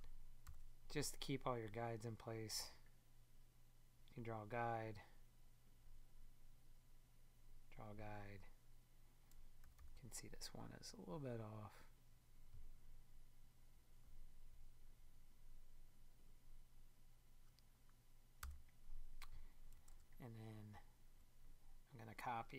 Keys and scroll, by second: 18.4 BackSpace, 19.9 super+Tab.